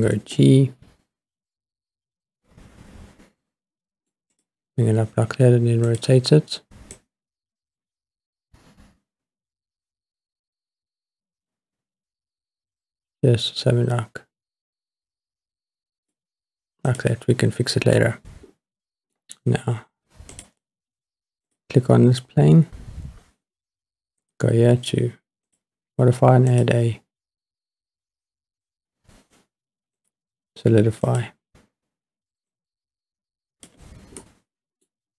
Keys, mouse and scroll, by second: 0.0 g, 0.4 middle click, 4.4 click, 5.9 click, 6.9 click, 7.8 click, 16.9 click, 18.0-19.2 middle drag, 20.4 click, 21.5 click, 22.7-24.5 scroll down 3, 25.5 click, 26.5-28.2 drag, 30.0-31.2 drag, 32.5-33.7 drag, 34.2-34.9 middle drag, 35.0-35.1 scroll down 7.